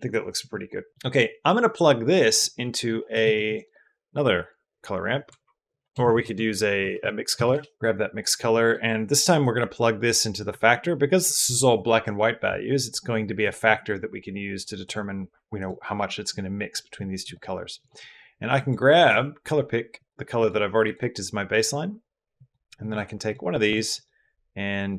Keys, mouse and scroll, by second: 0.9 click, 1.9 click, 2.4 click, 2.8 click, 3.0 shift+a, 5.8 BackSpace, 7.3 BackSpace, 8.3 click, 9.2-10.2 middle drag, 13.4 click, 14.4 click, 14.5 click, 17.0 click, 19.9 typing, 20.2 click, 20.7 click, 22.3 typing, 22.6 click, 23.7 click.